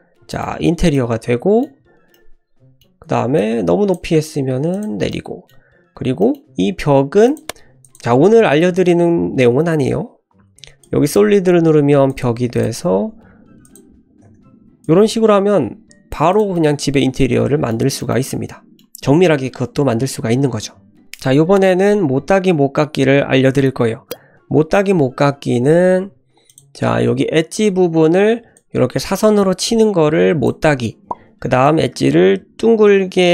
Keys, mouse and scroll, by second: 0.3 shift+middle click, 0.4-0.9 shift+scroll down 2, 0.7 Tab, 0.9 middle click, 2.1 middle click, 3.1 1, 3.4 click, 4.0 g, 4.9 Tab, 5.1-5.5 middle drag, 5.5 scroll up 1, 6.2 middle click, 7.2 click, 7.8-11.1 drag, 12.0-12.6 drag, 13.6 click, 14.8-16.1 shift+drag, 16.3 drag, 16.5-17.7 middle drag, 18.0 shift+middle drag, 18.2-18.7 middle drag, 26.5 click, 28.5-30.4 drag, 31.6-33.3 drag.